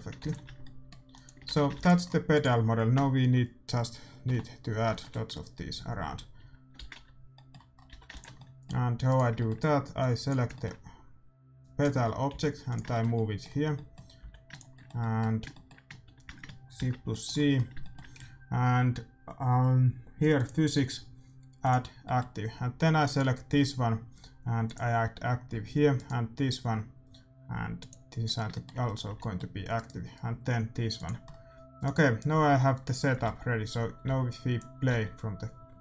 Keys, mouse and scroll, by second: 0.2 ctrl+s, 0.6-3.9 middle drag, 1.5 shift+z, 1.7 ctrl+s, 2.3-4.0 right drag, 5.7 KP_Divide, 6.9 shift+z, 7.9 a, 8.0 ctrl+s, 8.6-12.2 middle drag, 9.0-10.8 right drag, 9.9-13.4 drag, 12.2 g, 12.9-13.9 middle drag, 14.1 g, 16.7 shift+c, 20.3-23.4 drag, 22.4-24.6 middle drag, 23.5-24.7 right drag, 25.5 click, 25.5 a, 26.6-27.6 right drag, 27.7 click, 28.2 middle click, 29.0 a, 29.7-30.9 right drag, 31.5 a, 33.1 right click, 33.2 alt+a, 34.1 alt+a, 34.4-35.8 drag, 34.9 alt+a.